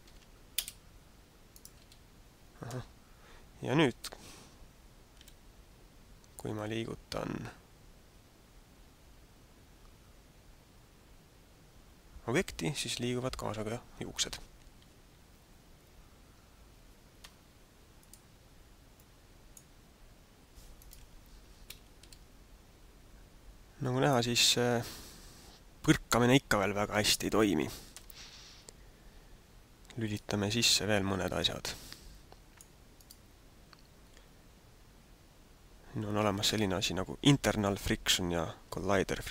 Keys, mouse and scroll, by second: 0.0 ctrl+p, 1.4 right click, 1.8 g, 3.8 alt+a, 5.2 g, 18.0 click, 18.9 click, 20.9 right click, 21.5 alt+a, 22.1 g, 30.1 click, 31.1 click, 32.9 right click.